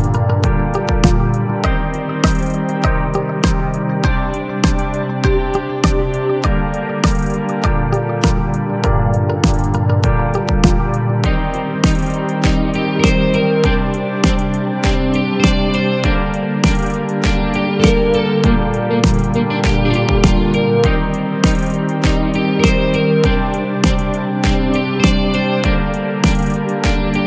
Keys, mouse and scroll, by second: 4.9 scroll down 2, 5.3 Tab, 5.9 s, 8.7 scroll up 2, 8.9 a, 9.1 a, 9.4 3, 9.5 click, 10.2-11.5 middle drag, 11.5 KP_1, 12.4-12.9 scroll down 1, 13.3 ctrl+right click, 14.2 g, 15.0 r, 16.7 KP_1, 17.1 KP_3, 18.9 ctrl+KP_Add, 19.5 r, 20.7-23.2 typing, 21.9 Tab, 24.6 KP_1, 24.9 KP_3, 26.0-26.7 scroll up 8, 26.7 g.